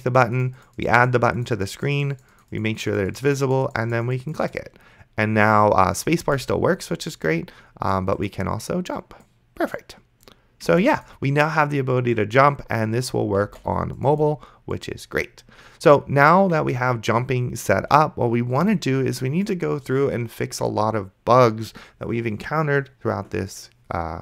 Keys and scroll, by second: 6.5 space, 10.9 space.